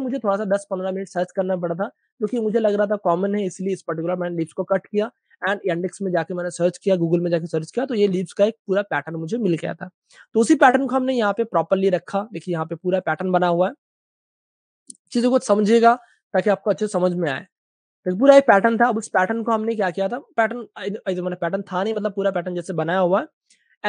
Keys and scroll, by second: 2.3 space, 3.8 space, 8.6 typing, 10.1 super+space, 10.2 super+space, 10.3-11.1 typing, 15.3 super+BackSpace, 16.0 super+space, 17.6 super+space, 17.8 super+space, 18.3 typing, 18.6 super+space, 18.6 super+space, 19.6 space.